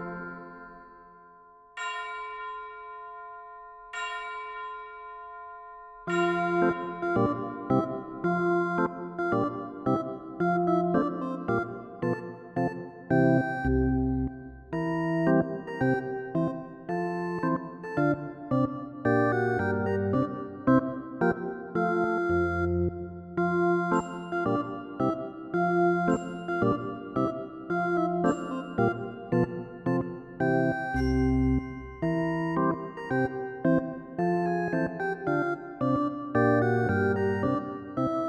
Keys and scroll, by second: 3.9 ctrl+z.